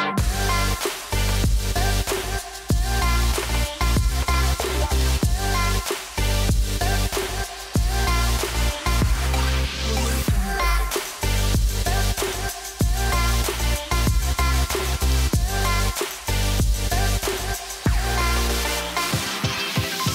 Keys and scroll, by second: 7.2-10.5 typing, 11.5 3, 12.1 •, 12.4 0.